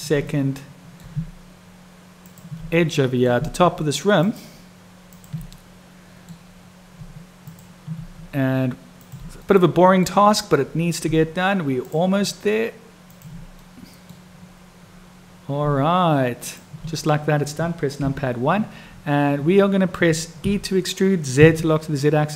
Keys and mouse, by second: 0.3 click, 2.8 middle click, 4.3 shift+click, 5.1 shift+click, 5.6 middle click, 7.4 shift+click, 8.9 shift+click, 9.5 middle click, 13.6 middle click, 18.0 KP_1, 20.4 e.